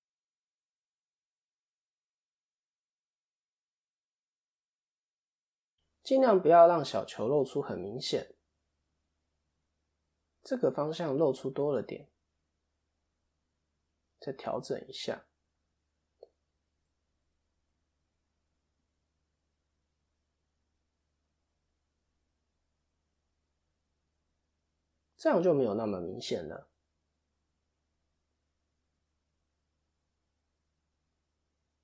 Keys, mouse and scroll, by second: 0.4 Tab, 0.4 click, 3.4 click, 3.4 middle click, 5.5 click, 5.9 middle click, 7.4-7.9 scroll down 6, 7.7 middle click, 11.0 KP_7, 12.4 click, 12.8-13.5 scroll up 3, 13.1 Tab, 13.9 Tab, 13.9 a, 14.6 click, 17.4 click, 17.4 middle click, 19.2 click, 20.0 middle click, 20.0 click, 21.0-22.5 scroll down 5, 21.4 middle click, 24.2 scroll down 1, 24.5 middle click, 26.1 scroll up 1, 26.7 ctrl+KP_7, 27.4-28.0 scroll up 5, 28.0 click, 28.0-28.7 scroll up 1, 28.7 scroll up 1, 29.3 Tab, 29.5 middle click, 30.5-31.1 scroll up 2, 30.9 middle click.